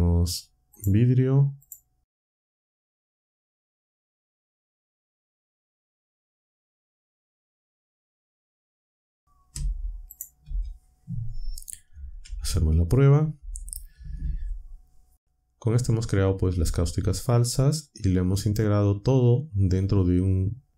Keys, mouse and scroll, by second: 0.7 click, 1.6 click, 2.3 ctrl+click, 3.3 c, 4.4-5.8 typing, 4.9 click, 6.0 ctrl+shift+click, 6.1 ctrl+scroll up 1, 6.3 click, 6.8 click, 7.4-7.8 drag, 8.3 click, 8.9 click, 9.5 Delete, 10.1 click, 10.4 Delete, 12.2-12.9 scroll up 2, 12.2 shift+z.